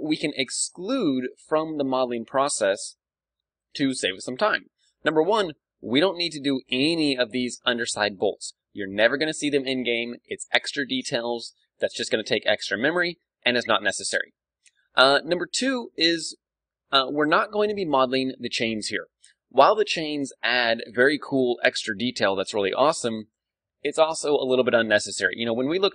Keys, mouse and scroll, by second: 5.3 d, 5.5-7.4 drag, 13.5 d, 13.8-16.7 right drag, 17.3 d.